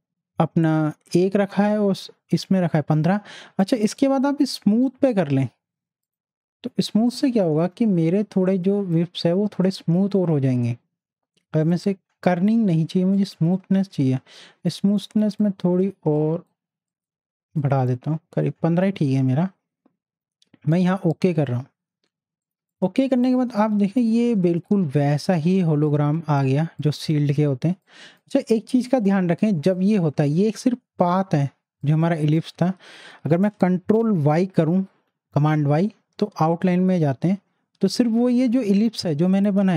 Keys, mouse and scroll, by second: 6.0 click, 6.0 click, 11.6 click, 11.6-16.2 drag, 15.0 click, 21.1 click, 23.5 z, 24.0-26.6 drag, 26.6 space, 26.8 click, 27.1 space, 27.8-31.9 drag, 34.5 ctrl+y, 39.6 ctrl+y.